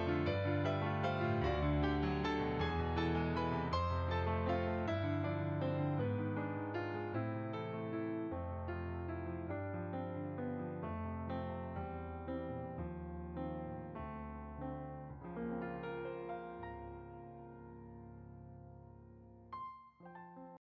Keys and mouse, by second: 0.4 click, 2.3 click, 2.4 middle click, 3.2 click, 5.6 middle click, 6.5 click, 10.4 click, 14.6 click, 18.1 click.